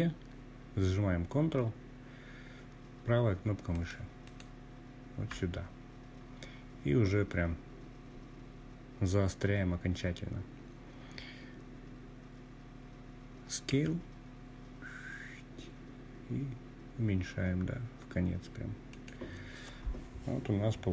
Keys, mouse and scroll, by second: 1.7 ctrl+right click, 11.7 s, 16.9 click, 20.1-20.9 drag.